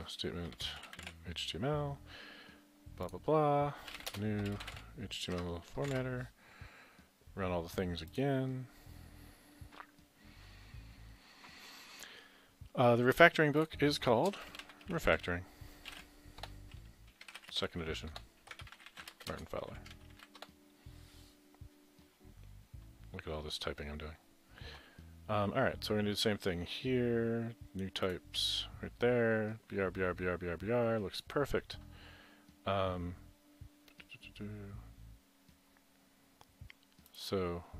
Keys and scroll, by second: 0.6-1.6 typing, 3.7-5.9 typing, 8.6 typing, 14.4-16.0 typing, 17.2-20.4 typing, 22.9-23.6 typing.